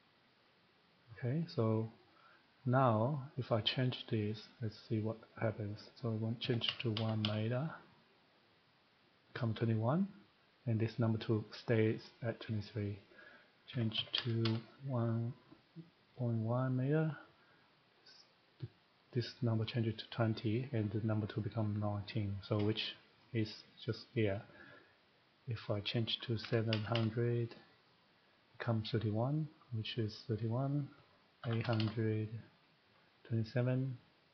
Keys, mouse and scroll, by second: 4.2 click, 6.4 typing, 8.5 click, 13.1 click, 13.7-14.1 typing, 16.6 click, 18.9-21.7 drag, 23.2-25.0 drag, 25.5 click, 26.4-26.7 typing, 28.0 click, 30.7 click, 31.2-31.9 typing, 32.6 click.